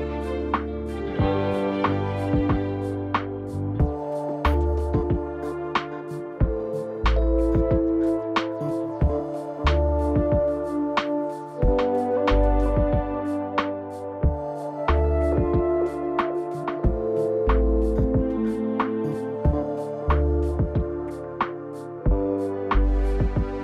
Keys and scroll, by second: 2.8 0, 10.6 0, 16.2 p, 21.8 Page_Down.